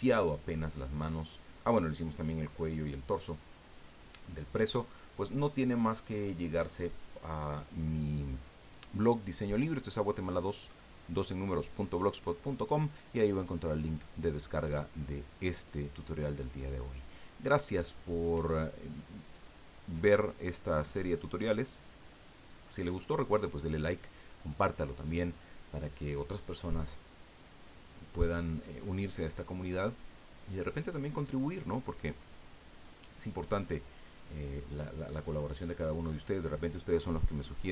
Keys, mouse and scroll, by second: 0.2-0.5 scroll up 2, 1.6-2.1 middle drag, 2.5-4.0 drag.